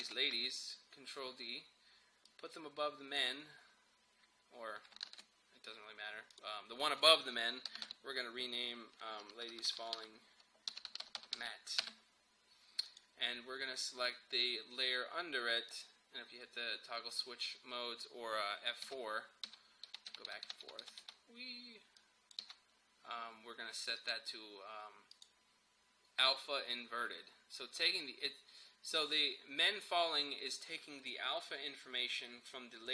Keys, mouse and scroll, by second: 0.1 ctrl+d, 2.3-5.1 drag, 5.1 ctrl+z, 6.4 click, 7.7 Return, 7.9 Right, 9.4 BackSpace, 10.5-11.9 typing, 12.9 click, 15.8 click, 19.0 F4, 22.0 click, 22.4 F4, 24.0 click.